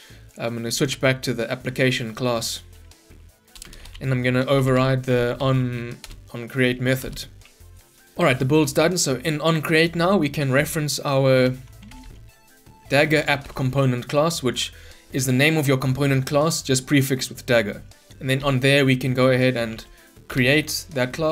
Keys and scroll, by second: 6.2 Return, 13.4 Return, 20.3 Return.